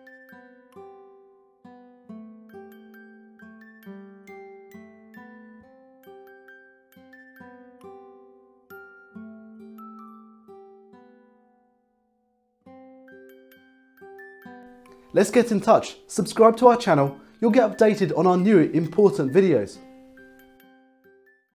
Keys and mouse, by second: 5.5 click.